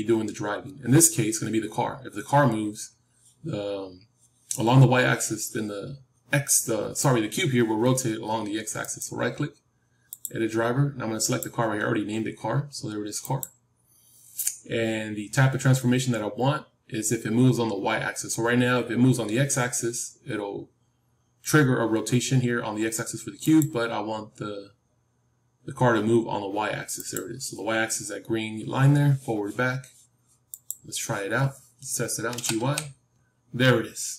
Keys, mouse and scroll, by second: 8.7-13.3 right drag, 30.6-32.4 drag, 32.2 g.